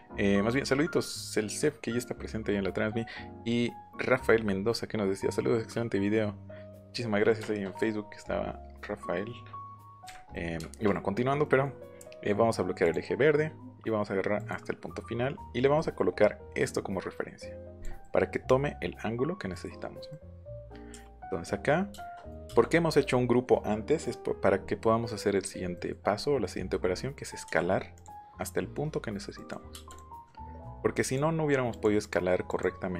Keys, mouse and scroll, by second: 7.4 shift+middle click, 8.0-10.0 scroll up 2, 10.0 Left, 10.3 middle click, 11.4 middle click, 12.8 click, 14.3 click, 15.7 middle click, 17.7 click, 19.5 middle click, 20.1 middle click, 21.9 shift+middle click, 25.1 middle click, 25.7 middle click, 25.9 right click, 27.1 middle click, 27.9 click, 29.3 click, 29.9 click, 30.2 middle click, 31.0 middle click, 31.7 middle click, 32.0 middle click, 32.5 middle click.